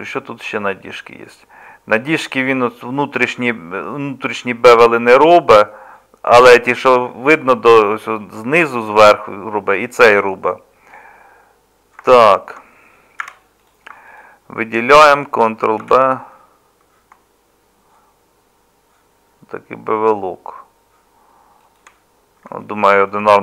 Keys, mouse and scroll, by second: 13.2 2, 15.8 ctrl+b.